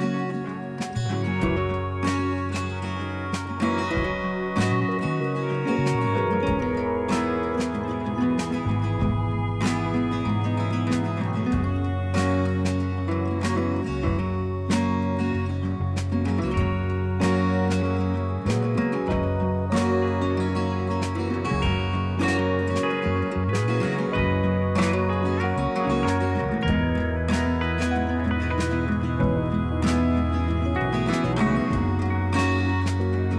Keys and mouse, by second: 3.0 click, 6.0 click, 7.0 click, 10.0 click, 10.1 click, 13.2 click, 16.0 alt+click, 18.0 ctrl+a, 19.9 space, 20.3 space, 22.6 space, 23.1 space, 24.3 space, 26.3 click, 28.3-30.0 drag, 30.3 click.